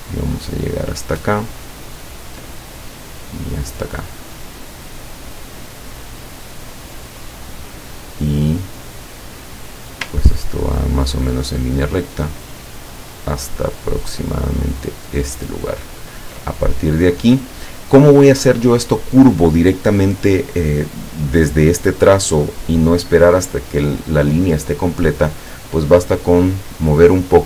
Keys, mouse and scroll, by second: 2.0 ctrl+click, 7.6 click, 15.3 ctrl+click.